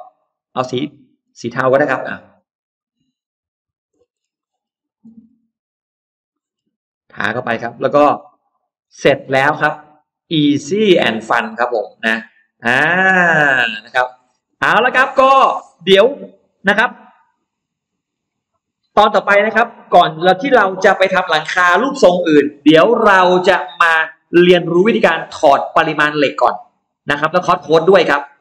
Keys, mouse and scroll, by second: 0.0 click, 0.7 click, 1.1 scroll up 1, 1.5 click, 2.4 click, 2.7 click, 3.3 click, 3.8 scroll down 1, 4.2 middle click, 4.5-4.8 scroll down 1, 4.7 middle click, 4.8 scroll up 1, 4.9 scroll down 1, 5.3 scroll up 1, 5.6 click, 5.9 click, 6.1 middle click, 6.4 scroll down 1, 7.3 click, 7.6 click, 7.9 scroll down 1, 8.2 middle click, 8.5-8.8 scroll down 1, 8.9 space, 9.0 click, 9.3-10.3 middle drag, 10.3-11.7 scroll up 3, 11.8-14.0 middle drag, 14.1-15.7 scroll down 4, 15.1 middle click, 16.1 middle click, 16.3-16.7 scroll down 1, 16.5 middle click, 16.9 scroll up 1, 17.3 middle click, 17.7-18.1 scroll down 2, 17.9 middle click.